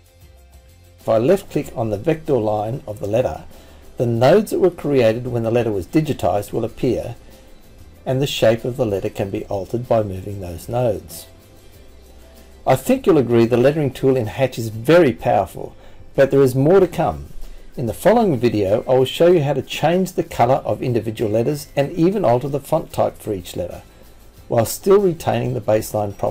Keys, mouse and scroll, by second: 1.1 click, 3.5 click, 5.4 click, 11.0 click, 11.6 click, 12.8 click, 15.7 click, 16.6 click, 18.0 click, 19.6 click, 20.2 click, 22.0 click.